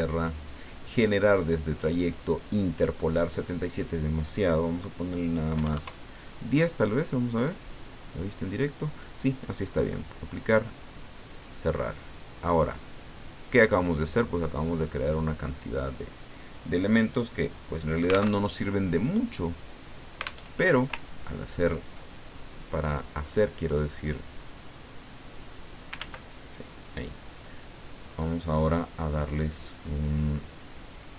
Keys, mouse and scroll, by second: 2.1 click, 3.3 click, 5.5 KP_1, 5.7 KP_0, 7.4 click, 9.8 click, 10.5 click, 11.7-13.2 drag, 13.5-15.2 drag, 18.4 alt+Tab, 20.4 alt+Tab, 22.9 click, 23.9 click, 24.7 click, 26.0 ctrl+z.